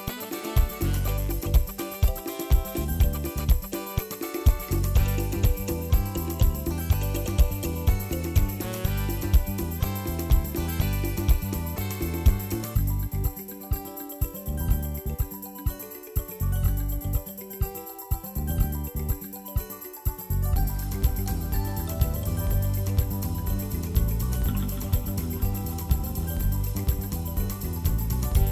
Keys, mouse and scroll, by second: 0.5 shift+click, 0.6 shift+click, 1.6 ctrl+l, 2.3 ctrl+s, 2.5 click, 3.0-4.4 drag, 3.7 ctrl+s, 4.8-6.6 drag, 6.6 t, 7.2-9.4 shift+middle drag, 8.4-9.4 drag, 9.7 shift+middle click, 10.0 n, 11.5 z, 11.7 scroll up 6, 12.0 shift+middle click, 12.3 z, 12.8 shift+middle click, 13.1 shift+a, 15.1 click, 15.5 shift+middle click, 16.0 shift+a, 17.3-18.3 drag, 18.5 scroll up 4, 18.7 middle click, 19.0-20.0 drag, 20.4 click, 20.7 ctrl+t, 21.0-22.3 shift+middle drag, 22.5-24.0 drag, 24.5 shift+a, 26.7 click, 27.3 click, 27.6 Delete, 28.2-28.5 drag.